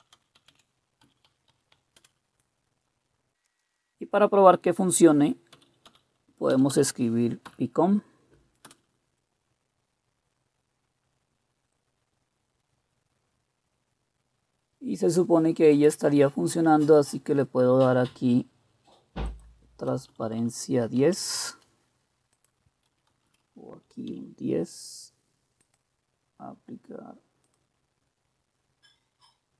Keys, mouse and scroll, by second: 0.0-3.9 typing, 5.5-7.4 typing, 8.7 Return, 20.1 Left, 20.1-24.1 drag, 20.3 Left, 20.5 Left, 21.0 1, 23.1 Left, 23.3 Left, 23.5 Left, 24.1 1.